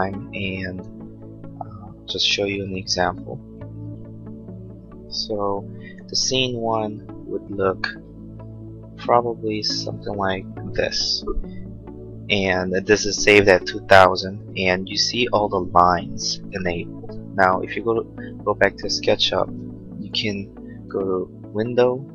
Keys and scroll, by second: 8.0 Right, 9.7 Left.